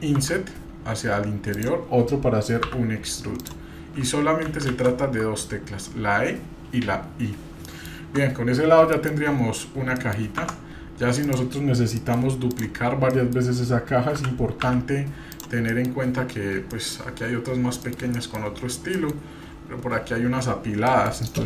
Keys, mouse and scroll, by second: 0.2 i, 7.6 middle click, 9.0 KP_Divide, 9.1 click, 9.4 scroll down 1, 10.0 middle click, 10.4 Tab, 11.2-12.0 drag, 12.0 middle click, 12.5 click, 13.2 middle click, 14.1 g, 15.7 middle click, 16.1 g, 16.3-16.6 scroll down 2, 16.7 middle click, 17.6 scroll down 1, 17.9 middle click, 18.1 middle click, 19.0 middle click, 19.0 scroll up 2, 19.3-20.3 scroll down 1, 20.3-20.6 scroll down 3, 20.8 middle click.